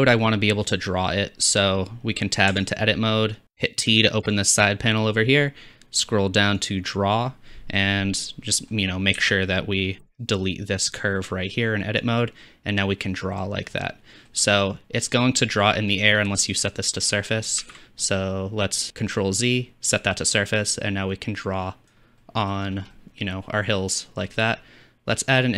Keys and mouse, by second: 2.5 Tab, 3.4 t, 3.9 t, 4.3 t, 5.7 Tab, 5.7 t, 6.9 t, 9.2 a, 10.0 x, 17.6 ctrl+z, 20.7-23.1 drag, 23.9-25.5 middle drag.